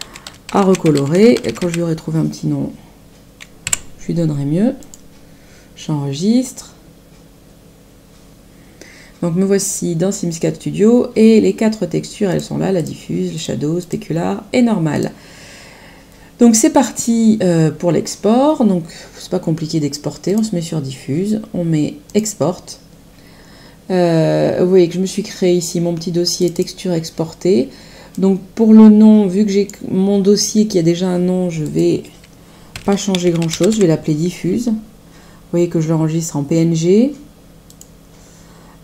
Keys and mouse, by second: 0.0-2.1 typing, 3.6 r, 4.8 click, 12.2 click, 14.9 click, 20.2 click, 22.0 click, 26.3 click, 28.1 click, 31.6 click, 32.5-34.2 typing, 37.6 click.